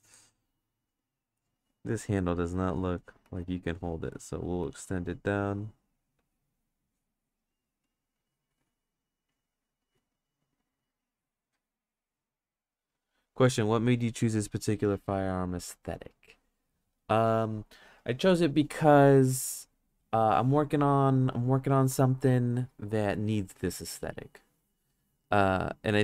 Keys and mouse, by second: 0.8 click, 1.3 click, 2.1 ctrl+z, 2.5 click, 3.2 ctrl+z, 3.6 click, 4.6 ctrl+z, 4.9 click, 6.8 click, 7.9 click, 8.1 click, 9.1 click, 10.0 ctrl+z, 10.3-11.5 drag.